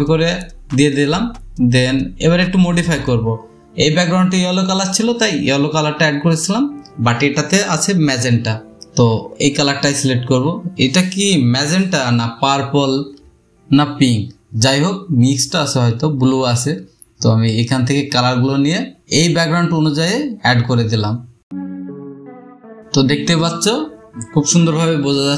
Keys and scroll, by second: 19.7 space, 20.3 space, 23.5 space, 24.1 space, 24.3 space.